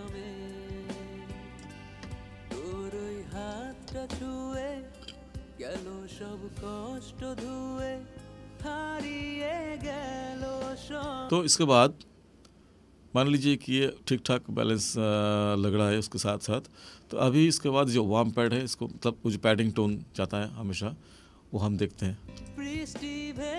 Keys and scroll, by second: 10.9 space, 22.2 space.